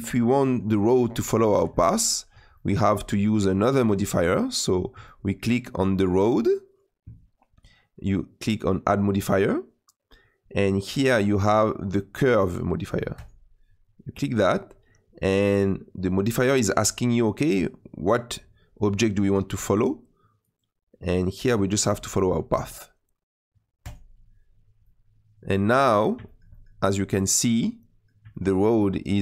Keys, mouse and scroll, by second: 4.4-5.0 scroll up 3, 5.0-6.2 shift+middle drag, 6.2 click, 24.8-26.8 middle drag, 26.8-27.2 scroll down 2, 27.2-29.2 middle drag.